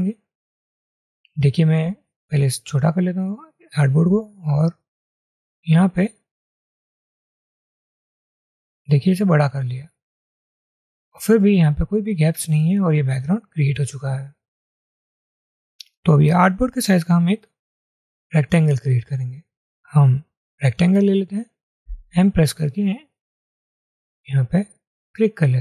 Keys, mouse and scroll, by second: 2.2-2.9 alt+scroll down 1, 4.4 alt+shift+click, 22.0 m.